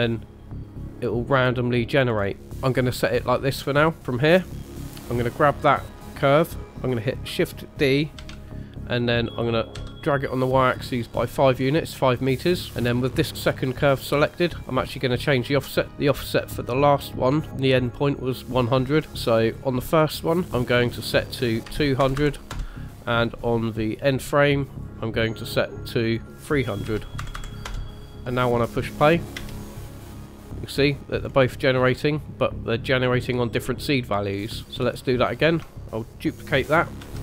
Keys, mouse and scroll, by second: 2.0-2.3 scroll down 3, 2.4 scroll up 3, 4.0 scroll up 1, 4.0 space, 4.5 click, 4.6 middle click, 8.2 shift+d, 11.8 middle click, 19.4 click, 20.5 click, 22.1 KP_0, 24.8 click, 26.0 click, 27.3 KP_0, 29.4 space, 30.6 middle click, 31.3-31.6 scroll up 2, 31.9 middle click, 34.3-34.7 scroll down 3, 34.7 middle click, 34.7 space, 37.0 shift+d.